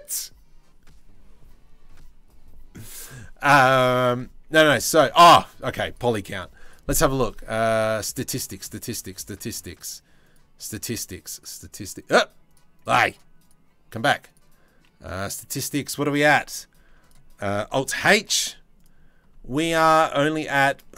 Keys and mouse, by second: 5.5 click, 7.6 click, 9.9 click, 15.9 Tab, 16.6 Tab, 17.9 alt+h, 19.6-20.8 shift+middle drag.